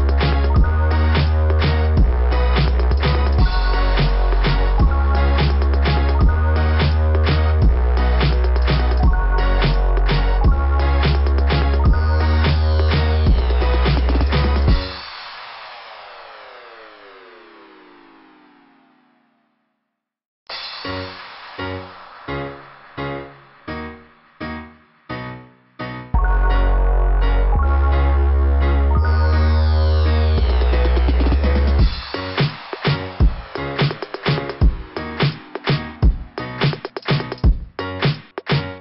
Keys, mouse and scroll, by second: 1.8 click, 2.0 click, 3.4 click, 3.5 click, 4.1 click, 4.3 click, 18.7 click, 18.8 click, 26.1 click, 27.4 click, 27.8 click, 29.2 click, 29.4 click.